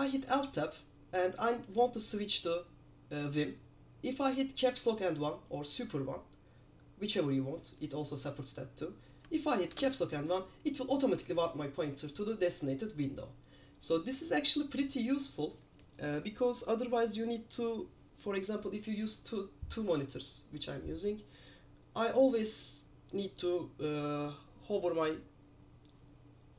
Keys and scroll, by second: 9.8 super+1.